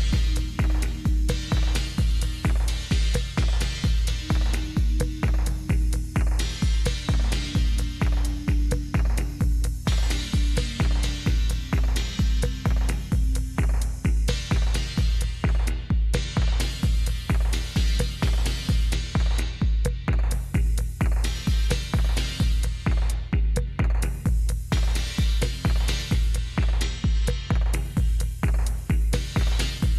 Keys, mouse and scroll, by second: 2.9 Down, 3.2 Down, 3.5 Down, 3.8 Down, 4.0 Down, 9.3 Down, 13.1 Down, 16.0 Down, 16.8 Down, 17.6 Down, 17.8 Down, 18.0 Down, 18.2 Down, 18.6 Down, 19.0 Down, 19.3 Down, 19.5 Down, 20.2 Down, 20.4 Down, 21.2 Up, 21.4 Up, 22.8-24.9 Up.